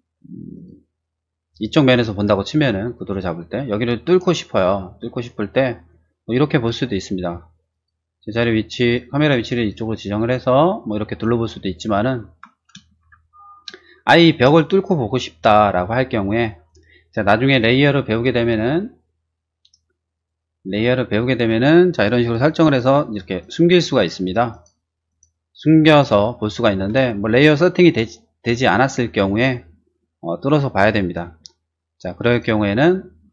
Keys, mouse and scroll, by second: 0.5 click, 1.5 middle click, 2.1-3.4 middle drag, 4.9 middle click, 5.5 middle click, 7.7 click, 8.0 click, 8.4 click, 8.6 click, 9.0 click, 9.9 click, 11.1 click, 11.5 click, 11.5 right click, 11.7 right click, 13.0 shift+z, 13.8 middle click, 14.3 space, 18.2 click, 20.1 click, 21.1 click, 22.6 click, 23.4 click, 23.9 click, 24.5 click, 25.0 click, 25.8 click, 27.1 shift+middle click, 32.3 click.